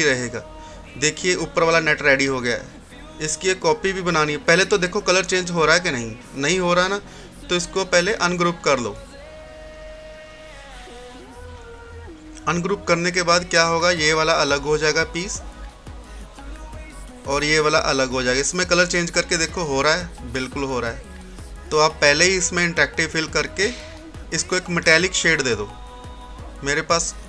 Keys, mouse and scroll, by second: 1.3 scroll down 1, 1.9 scroll up 1, 4.2 click, 5.9 ctrl+z, 8.1 right click, 11.2 click, 12.5 scroll down 1, 13.6-16.9 drag, 17.0 click, 20.7 scroll up 1, 22.7-24.6 drag.